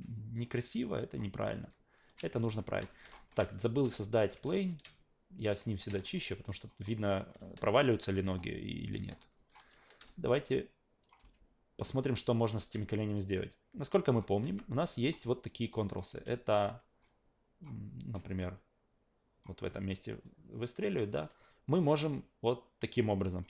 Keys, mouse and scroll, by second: 1.5 alt+right click, 2.6 alt+click, 3.1 alt+middle click, 3.5 shift+right click, 4.5 alt+click, 4.9 shift+click, 6.0 alt+middle click, 6.3-6.7 alt+drag, 6.9 alt+middle drag, 7.2 click, 7.5 alt+right click, 8.3-9.2 alt+middle drag, 9.3 alt+right drag, 10.3-11.1 drag, 11.2 alt+v, 12.5 alt+v, 13.1-13.8 alt+drag, 13.9 alt+right click, 14.2 alt+middle drag, 14.5 q, 15.0 click, 15.3 alt+middle click, 15.5 alt+right click, 15.8 alt+click, 16.1 e, 16.4 alt+right click, 17.0 alt+click, 18.5 click, 19.7-21.0 alt+drag, 21.7 click.